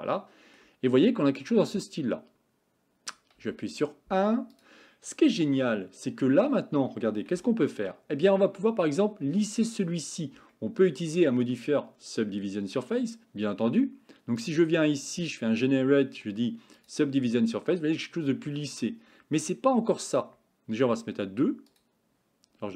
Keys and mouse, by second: 0.0 middle click, 3.4 KP_1, 5.5 Tab, 7.4 shift+middle click, 10.6 shift+middle click, 14.4 click, 16.6 click, 21.7 click.